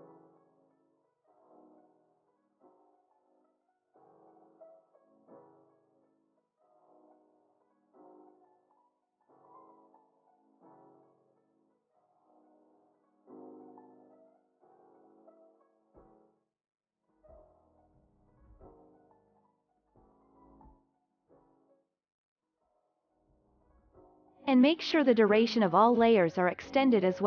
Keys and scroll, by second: 5.3 ctrl+k, 7.2 BackSpace, 7.7 0, 7.8 Return, 9.3 ctrl+k, 11.3 BackSpace, 11.5 2, 11.7 Right, 12.4 Return, 17.0 alt+], 17.4 ctrl+s.